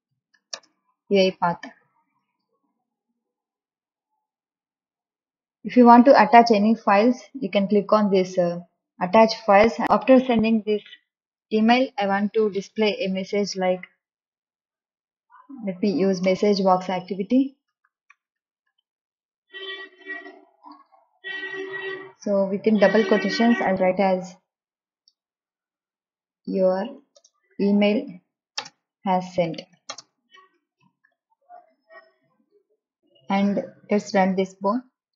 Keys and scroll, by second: 0.0-3.2 typing, 13.1 m, 13.4 e, 13.9 s, 15.2 Right, 16.6 BackSpace, 17.9-19.8 typing, 24.2 shift+', 25.3-32.0 typing.